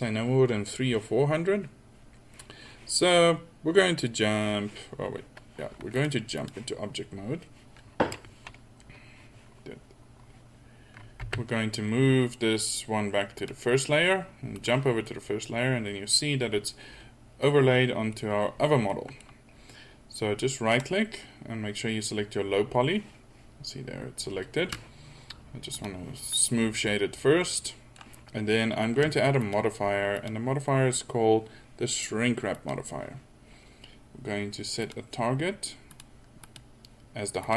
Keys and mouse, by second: 11.3 m, 15.2-16.2 middle drag, 17.6-18.5 middle drag, 18.6-19.0 middle drag, 25.8 right click, 26.4 middle drag, 27.2-28.6 middle drag.